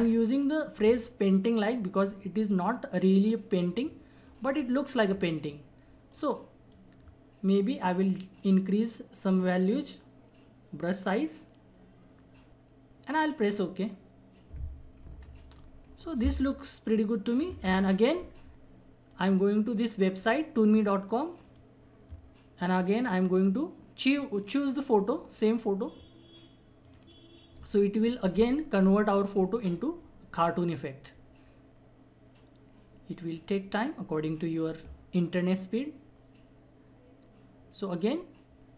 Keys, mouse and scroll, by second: 13.5 click, 15.2 ctrl+=, 16.2 space, 16.3 click, 16.7 space, 19.1 click, 20.0-21.4 scroll up 1, 21.4 click.